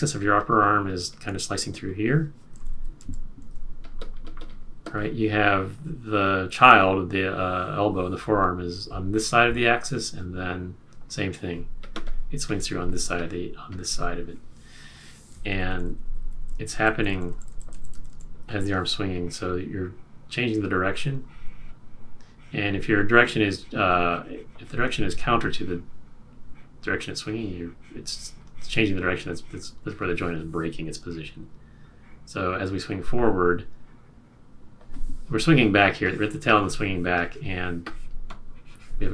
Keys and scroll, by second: 2.6 super+z, 15.5 super+z, 16.1 super+z, 16.6 super+z, 17.1 super+z, 18.1 super+z.